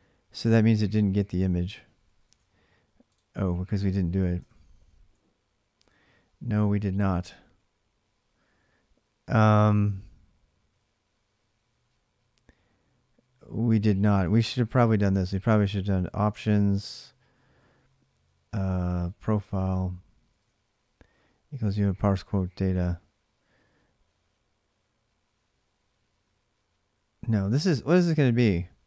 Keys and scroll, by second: 2.0 alt+Tab, 4.2 ctrl+[, 4.2 ctrl+j, 5.6-7.5 typing, 13.6-17.2 typing, 18.3-22.0 typing, 26.7-28.2 typing.